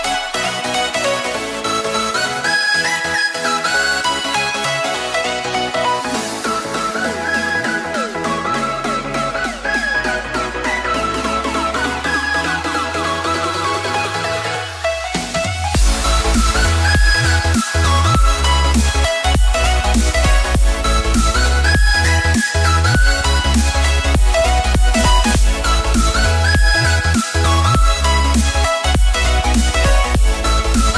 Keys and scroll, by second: 30.6 ctrl+-, 30.8 ctrl+-.